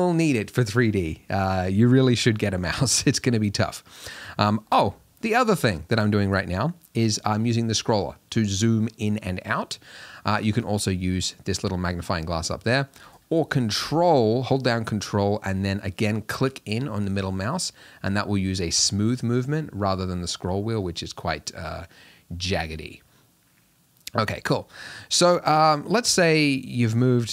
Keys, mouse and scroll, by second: 2.4-3.3 scroll down 2, 3.3-4.6 scroll up 2, 4.6-6.1 scroll down 2, 6.1-6.8 scroll up 2, 6.8-7.4 scroll down 1, 7.4 scroll down 1, 7.7-8.4 scroll up 2, 8.4-9.5 scroll down 2, 10.8-15.4 drag, 15.4-18.1 ctrl+middle drag, 19.7 scroll up 1, 20.0-20.3 scroll down 1, 20.3-20.9 scroll up 2, 20.9-21.4 scroll down 2, 21.4-22.1 scroll up 2, 22.1 scroll down 1, 22.3-22.7 scroll up 2, 22.7-23.1 scroll down 2, 23.1-24.9 middle drag, 24.9-25.7 scroll down 1, 26.7 g.